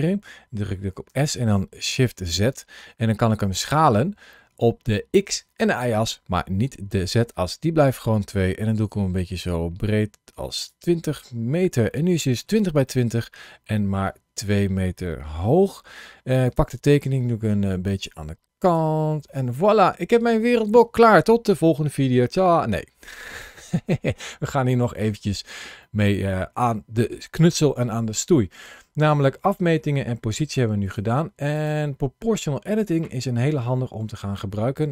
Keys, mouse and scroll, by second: 0.9 s, 1.8 shift+z, 10.5 click, 11.7 shift+middle click, 12.7 middle click, 16.3 click, 17.3 g, 18.4 click, 19.1 middle click, 23.2 click, 25.6 middle click.